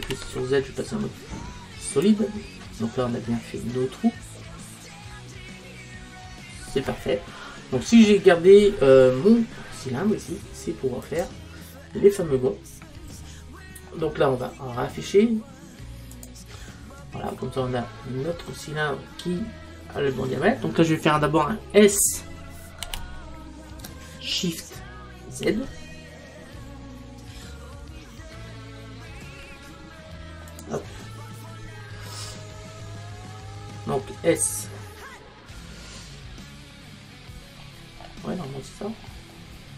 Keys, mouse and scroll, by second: 0.1 z, 3.1-7.0 middle drag, 8.6-10.6 middle drag, 11.1 click, 13.0-15.3 middle drag, 16.2 click, 18.2-19.6 middle drag, 19.6-20.3 scroll down 1, 20.3-22.5 middle drag, 22.9 s, 37.6-39.0 middle drag, 39.0-39.7 scroll down 1.